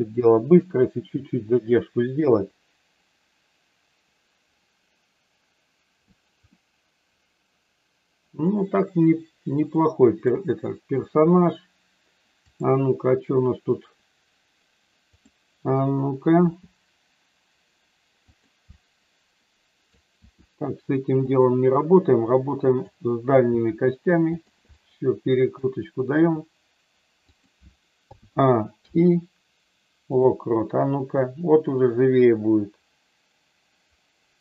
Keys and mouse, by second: 6.6-10.2 middle drag, 12.3 click, 16.4 r, 18.2 click, 18.7-20.0 middle drag, 20.2 r, 21.2 click, 22.2 click, 23.4 r, 24.2 click, 24.7 middle click, 26.2 r, 28.1 a, 28.7 i, 31.2-34.4 drag.